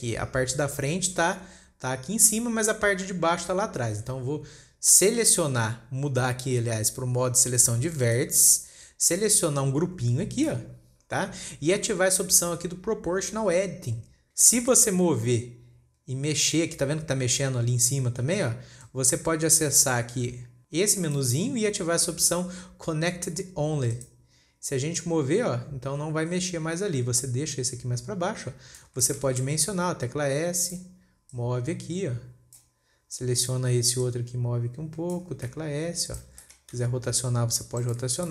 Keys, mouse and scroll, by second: 1.8 Tab, 4.4 Tab, 8.5 click, 10.1 click, 14.9 click, 21.5-24.6 drag, 25.4 drag, 29.5-30.0 shift+middle drag, 30.0 s, 31.7 click, 33.6 click, 34.5 click, 36.1 s, 36.8-37.2 shift+middle drag, 37.2 r.